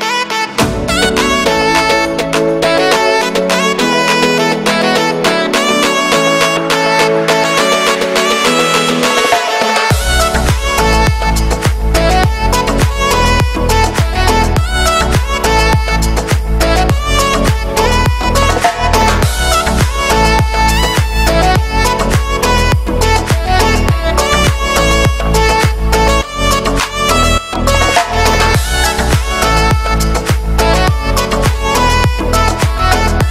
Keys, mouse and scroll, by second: 1.2 shift+middle click, 1.9 scroll up 1, 2.0 middle click, 2.2 e, 8.0 scroll down 1, 8.1 shift+middle click, 8.6 scroll up 2, 8.8 s, 10.0 shift+middle click, 10.5 s, 11.1 scroll down 2, 11.3 middle click, 12.0 scroll up 1, 12.3-13.5 shift+middle drag, 13.5 ctrl+KP_Add, 13.8 s, 15.7-16.8 middle drag, 18.5 ctrl+KP_Add, 19.3 shift+middle click, 19.9 scroll up 1, 20.1 s, 23.6 middle click, 24.1-25.2 scroll up 2, 25.2 right click, 25.7 shift+d, 27.6-29.3 drag, 29.3 e, 31.2 ctrl+KP_Add, 31.8-33.3 shift+middle drag.